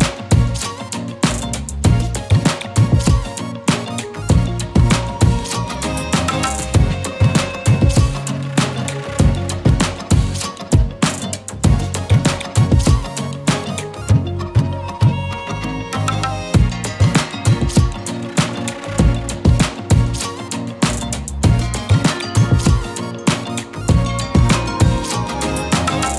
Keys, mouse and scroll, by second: 3.1-4.5 typing, 5.4 click, 14.7 Return, 16.6 click, 17.6 z, 17.8 click, 18.1 space, 18.2 click, 21.3-21.9 click, 22.1 ctrl+z, 25.5-26.1 drag.